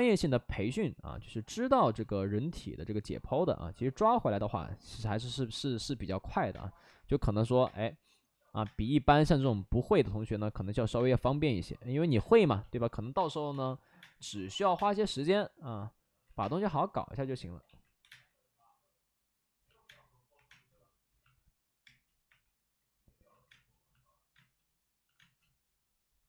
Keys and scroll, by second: 6.5-9.3 typing, 10.7 ctrl+z, 10.9 space, 12.1-14.7 typing, 16.1 ctrl+z, 16.3 space, 17.5 ctrl+z, 18.0 space, 18.0 1, 19.8 space, 20.4 space, 20.4 3, 21.8 space, 22.2 3, 23.2 ctrl+z, 23.4 space, 24.2 space, 25.1 space.